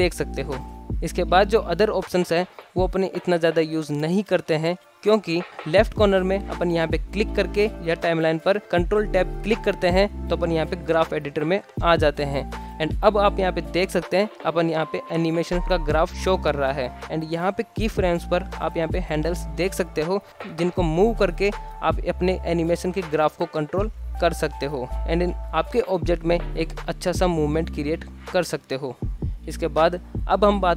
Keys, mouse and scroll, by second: 0.0 middle click, 0.6 t, 6.6-9.7 drag, 10.5 ctrl+Tab, 12.4 click, 13.3-16.4 middle drag, 19.9-23.5 drag, 23.7 space, 24.4 space, 24.6-25.2 drag, 25.2 space, 26.1 click, 27.0 space, 27.6 space, 27.9-28.3 drag, 28.3 space, 28.9 space, 29.1 click, 29.9-30.2 shift+middle drag, 30.6 shift+middle drag.